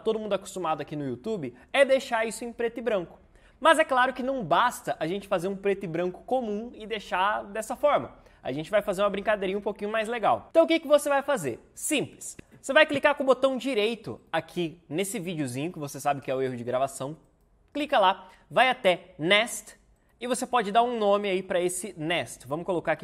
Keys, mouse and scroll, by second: 22.7-23.0 typing.